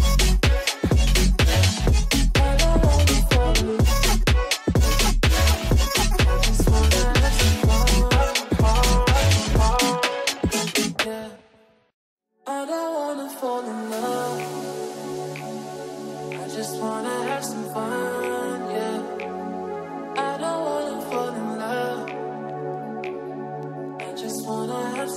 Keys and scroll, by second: 0.8 F4, 4.2 F3, 16.1 ctrl+q, 19.7 ctrl+z, 20.2 space.